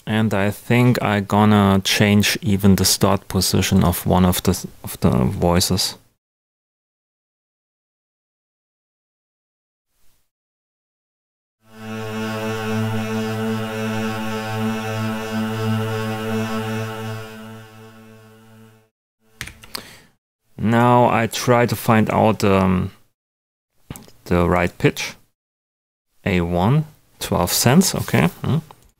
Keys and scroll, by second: 19.3 super+g.